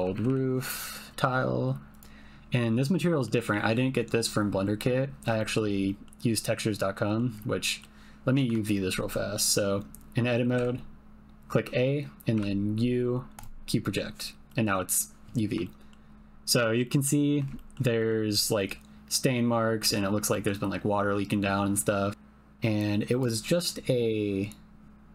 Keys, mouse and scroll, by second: 0.2 o, 3.2 click, 5.4 shift+click, 5.9 ctrl+click, 6.4 ctrl+click, 7.7 click, 8.5 Tab, 10.6 a, 12.3 u, 14.5 click, 15.6 shift+click, 16.8 shift+click, 16.8 shift+middle click, 17.6 ctrl+middle click, 18.0 middle click, 20.3 middle click, 22.9 click.